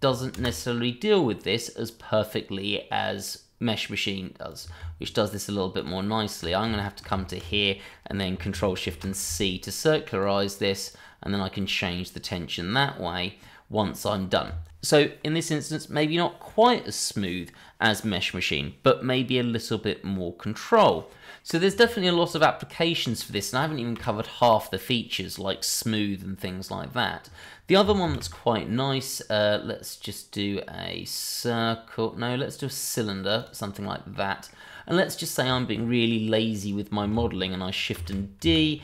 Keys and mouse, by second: 0.3 space, 0.8 middle click, 2.7-3.2 middle drag, 4.5 click, 5.8 ctrl+click, 6.7 shift+click, 7.2 shift+middle click, 8.8 ctrl+shift+c, 10.1 click, 10.5 click, 10.9-13.8 drag, 14.4 Tab, 15.1 click, 19.2-19.6 middle drag, 19.6 Tab, 20.5 shift+middle drag, 22.3-23.0 middle drag, 23.1 click, 23.9 Delete, 28.0 shift+a, 34.1-34.5 middle drag, 34.7-35.2 middle drag, 35.5 shift+middle drag, 36.6 click, 37.9 shift+d, 38.4 Escape.